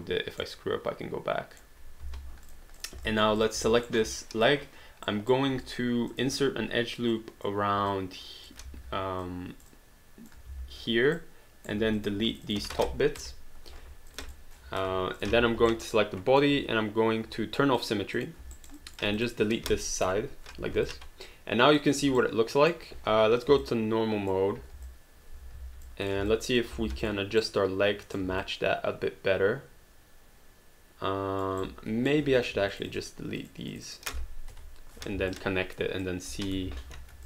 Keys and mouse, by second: 0.4 middle click, 2.0 h, 2.5 click, 3.1 alt+click, 3.4 click, 3.9 alt+right click, 4.0 alt+click, 5.1 alt+right click, 6.3 click, 9.2 click, 10.5 ctrl+z, 11.1 right click, 11.7 q, 12.0 click, 12.3 shift+click, 13.2 Delete, 14.1 click, 14.8 Delete, 15.2 click, 15.7 alt+right click, 15.9 alt+click, 17.8 click, 18.5 alt+right click, 18.8 alt+click, 19.2 click, 20.0 Delete, 20.9 alt+click, 22.2 right click, 23.1 1, 23.6 alt+click, 24.9 alt+click, 25.3 click, 25.5 alt+click, 25.8 click, 26.3 alt+click, 26.8 alt+d, 27.0 click, 27.4 right click, 28.4 alt+click, 31.6 right click, 32.2 q, 32.4 click, 32.7 shift+click, 34.5 Delete, 35.3 alt+click, 36.7 ctrl+z.